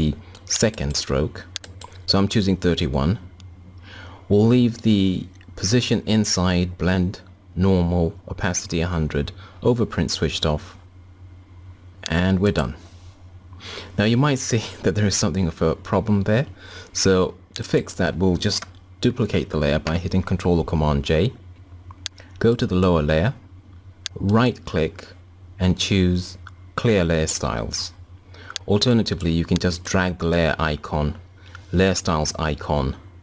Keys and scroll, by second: 19.5 ctrl+j.